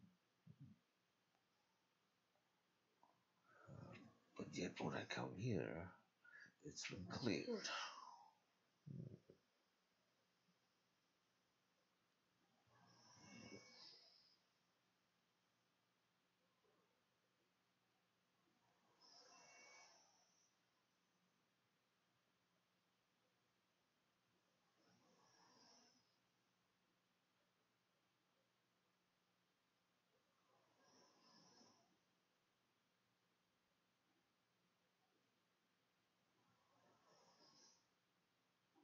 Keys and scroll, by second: 19.8-22.9 typing, 24.5-26.2 typing, 32.2-37.9 typing, 33.3 Delete.